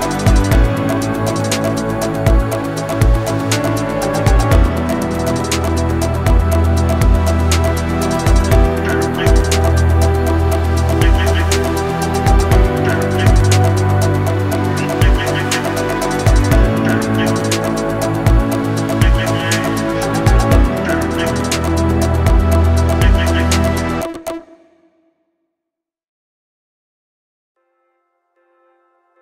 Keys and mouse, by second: 0.0 ctrl+r, 1.0 a, 1.3 b, 2.1 g, 3.6 b, 3.6 a, 4.7 g, 5.8 a, 6.0 b, 6.4 g, 7.4 a, 8.1 ctrl+r, 8.7 a, 8.9 b, 10.4 g, 11.3 a, 11.6 b, 12.1 g, 13.2 shift+click, 13.5 a, 14.1 b, 14.8 g, 15.9 a, 16.1 b, 16.6 g, 17.7 a, 17.9 b, 18.4 g, 19.8 a, 19.9 b, 20.2 g, 21.5 a, 23.4 b, 23.9 g, 25.2 a, 25.6 shift+click, 28.9 shift+click.